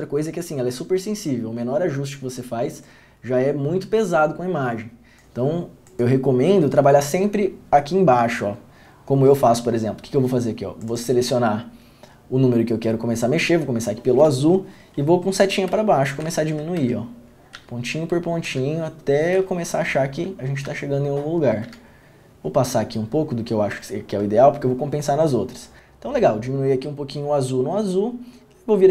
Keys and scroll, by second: 15.8 Down, 16.4 Down, 16.9 Down, 17.7 Down, 18.6 Down, 19.5 Down, 20.8 Down, 21.8 Down.